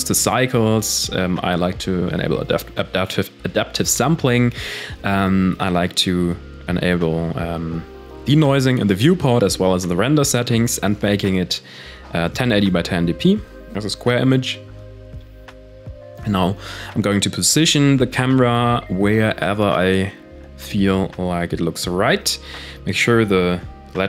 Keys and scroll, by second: 12.5 KP_0, 13.3 g, 15.1 g, 17.6 g, 23.0 m.